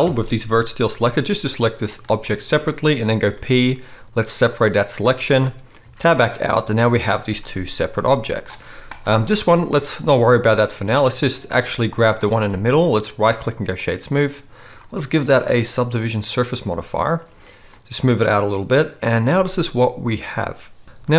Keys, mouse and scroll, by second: 0.0 ctrl+l, 0.9 g, 3.9 p, 5.8 Tab, 7.3 click, 7.5-8.6 middle drag, 7.8 g, 9.1 g, 12.6-13.2 middle drag, 13.2-14.8 right drag.